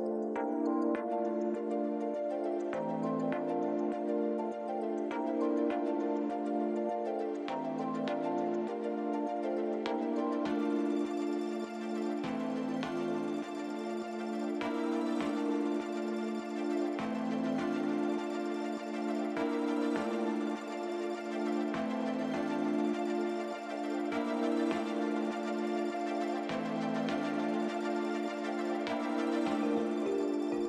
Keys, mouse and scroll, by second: 0.1 click, 0.9 click, 1.0 click, 2.4 o, 4.9 click, 13.0 click, 13.8 click, 23.0 click, 24.0 click, 24.2 click, 29.3 click.